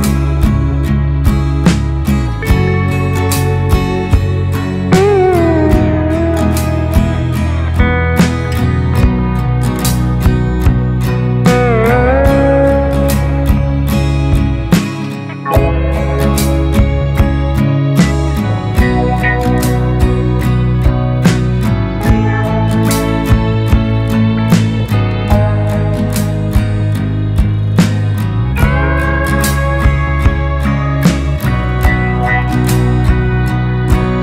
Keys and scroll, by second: 0.2 Right, 1.4 Right, 4.1 Left, 6.6 Left, 6.8 Left, 7.0 Left, 7.2 Left, 7.4 Left, 8.6 ctrl+space, 9.3 space, 11.5 ctrl+space, 14.3 ctrl+space, 15.7 ctrl+space, 17.4 ctrl+space, 18.5 Delete, 19.0 ctrl+space, 19.5 ctrl+space, 24.0 Right, 24.2 Right, 24.4 Right, 24.6 Right, 24.8 Right, 27.1 Left, 27.2 Left, 27.4 Left, 27.6 Left, 27.7 Left, 29.9 ctrl+space.